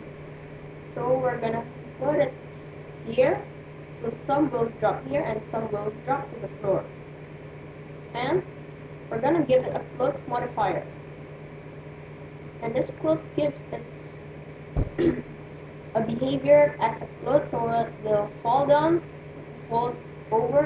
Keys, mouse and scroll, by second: 0.4-1.8 drag, 9.3-11.2 drag, 11.0-12.9 middle drag, 17.4-19.3 middle drag.